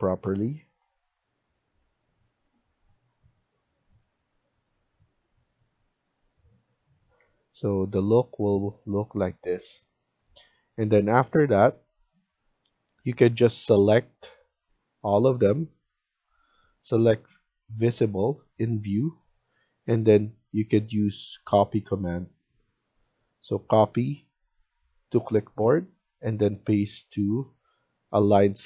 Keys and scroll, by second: 2.2 Escape, 2.4 Escape, 4.4 Escape, 6.8 Escape, 7.1 Escape, 13.2 Escape.